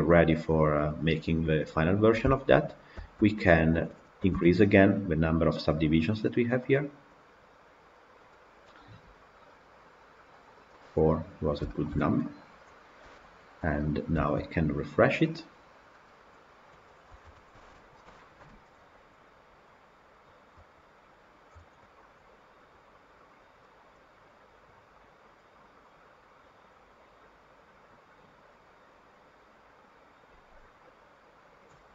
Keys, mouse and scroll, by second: 2.2 shift+middle drag, 2.4-2.8 scroll down 3, 2.8-3.5 shift+middle drag, 3.5 click, 4.2 KP_Decimal, 10.4-11.0 drag, 11.0-11.6 scroll down 2, 11.6 shift+middle click, 12.3 click, 12.9 KP_Decimal, 13.7-30.9 middle drag, 30.9-31.9 drag.